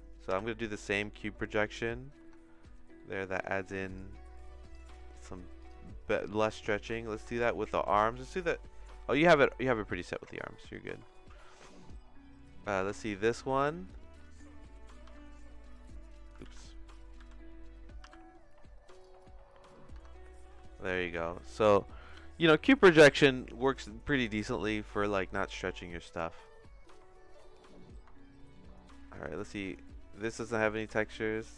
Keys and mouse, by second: 0.3 u, 2.2 Tab, 2.9 middle click, 3.9 click, 5.6 click, 7.2 Tab, 7.7 a, 9.2 middle click, 10.1 Tab, 10.7 middle click, 11.1 shift+middle click, 11.8 click, 12.7 Tab, 13.4 a, 15.0 i, 16.4 ctrl+z, 17.1 a, 18.0 u, 19.9 Tab, 20.3-21.7 shift+middle drag, 23.3 middle click, 23.7 shift+middle click, 24.2 middle click, 24.7 middle click, 25.1 shift+middle click, 27.7 middle click, 28.1 shift+middle click, 28.9 middle click, 29.5 middle click, 30.6 shift+middle click.